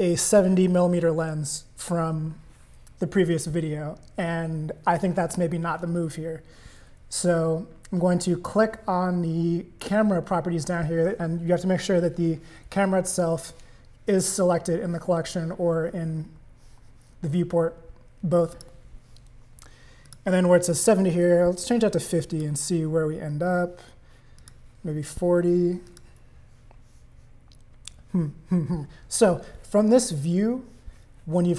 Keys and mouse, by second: 18.5 click, 20.0-22.6 drag, 24.4-26.2 drag.